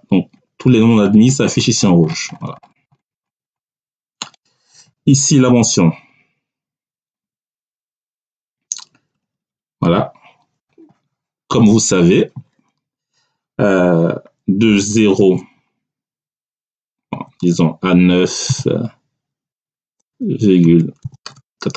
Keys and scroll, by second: 7.1 Down, 9.0 Right, 9.6 Right, 15.1 0, 17.0 Tab, 18.4 9, 19.9 ,, 20.9 9.